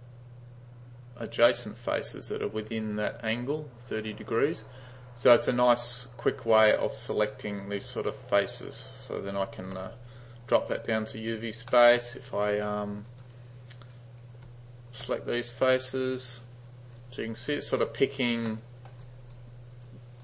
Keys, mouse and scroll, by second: 5.5-7.8 drag, 9.7 d, 11.2 click, 11.7 middle click, 12.5-13.1 drag, 14.5 g, 17.0-17.7 drag, 18.5-19.0 middle drag, 19.1 click, 19.9-20.2 drag.